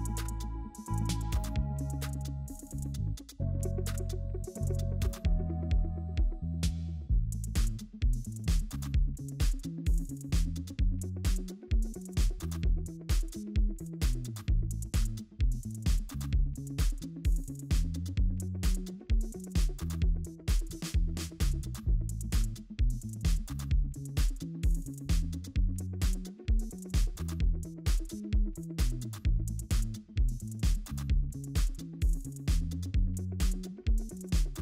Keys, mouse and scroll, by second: 1.4-1.7 scroll up 1, 2.9 scroll down 1, 3.5-4.5 scroll up 1, 4.7 ctrl+j, 8.7 alt+click, 9.7 right click, 11.2 alt+click, 12.3 alt+click, 12.7-13.3 alt+scroll down 1, 13.3-14.5 scroll up 1, 14.5 double click, 14.7-16.5 scroll up 1, 21.9 right click, 23.1 ctrl+z, 25.5 ctrl+z, 25.7 ctrl+z, 30.4-32.4 scroll up 1.